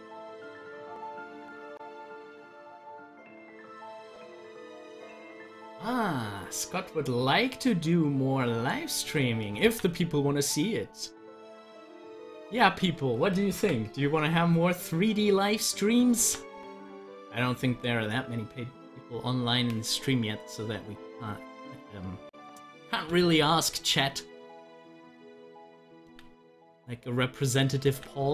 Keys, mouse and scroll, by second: 5.1 ctrl+z, 9.7 ctrl+z, 13.5 ctrl+z, 15.0 click, 16.2 ctrl+z, 23.2 z, 23.8-26.0 drag, 26.0 ctrl+z, 27.0 click, 27.9 ctrl+z.